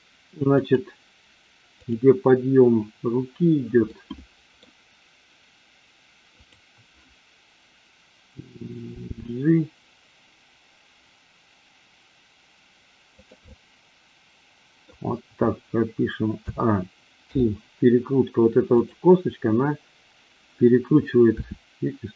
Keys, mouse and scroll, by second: 0.4 click, 1.7 click, 3.8-4.7 middle drag, 6.3 click, 9.1 g, 13.1 click, 13.5-14.9 middle drag, 16.3 a, 17.2 i, 18.7 click, 21.3 r.